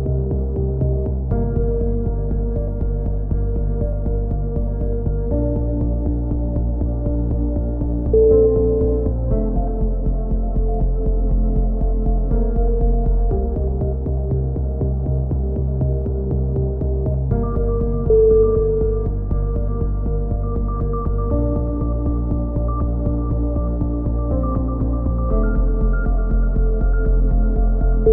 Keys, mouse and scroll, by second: 0.4 z, 1.4 z, 1.8-3.2 middle drag, 3.2-4.2 drag, 5.4 z, 5.8-6.8 drag, 8.3-9.3 drag, 10.1-13.0 drag, 13.8 KP_3, 14.4 z, 14.8 click, 16.0 middle click, 16.1 z, 16.3 click, 18.7-19.7 drag, 19.8 ctrl+KP_7, 20.2 Tab, 20.6 z, 21.1 z, 22.4 click, 23.1 click, 23.8-25.3 drag, 26.7 ctrl+z.